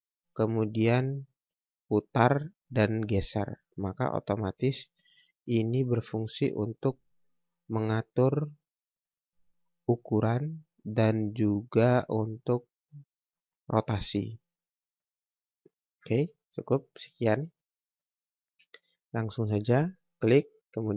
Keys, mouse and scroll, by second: 6.1 shift+click, 17.3 Delete, 18.1 scroll down 1, 19.9 click, 20.2 scroll up 1, 20.7 scroll down 1.